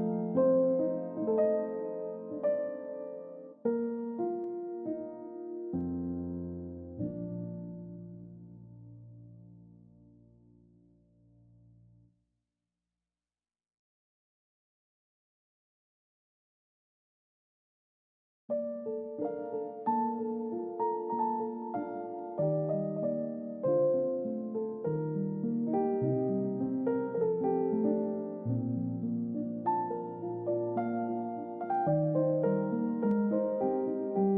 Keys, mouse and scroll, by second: 6.9 scroll down 1, 11.1-12.5 scroll down 1, 14.0-15.2 scroll down 1, 16.4 middle click, 16.9-17.4 scroll up 1, 18.6 scroll down 1, 19.0 middle click, 19.9-20.3 scroll up 1, 21.8 ctrl+v, 22.8 typing, 23.5 Return, 25.8 typing, 26.2 Return, 28.3 middle click, 30.3-32.1 scroll up 1.